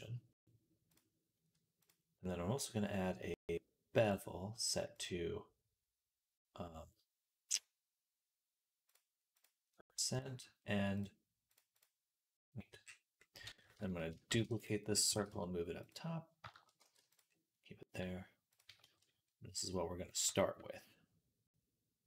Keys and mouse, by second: 8.8 right click, 11.4 right click, 13.8-15.8 shift+drag, 13.8 shift+middle click, 13.8 shift+right click, 14.1 shift+d, 15.0 g, 15.8-22.0 middle drag, 16.6 g.